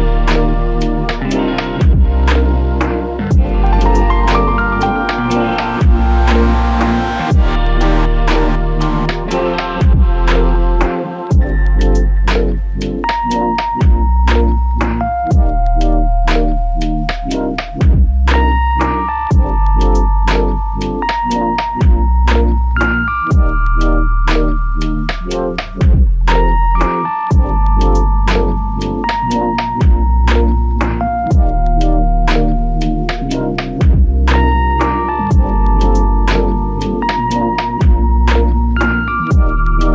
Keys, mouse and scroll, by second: 13.3 double click, 26.4 double click, 28.0 alt+click, 38.2 ctrl+scroll down 1.